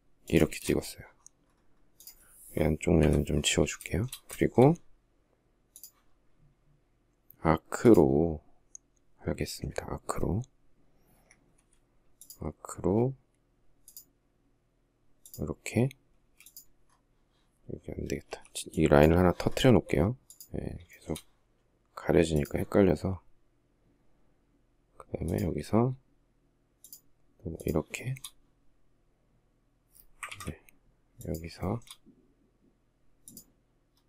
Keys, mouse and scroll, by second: 2.4 Delete, 3.2 shift+middle click, 3.7 shift+middle click, 10.5 Escape, 15.5 space, 17.6 e, 20.3 shift+middle click, 27.3 shift+middle click, 29.7 ctrl+z, 31.0 shift+middle click.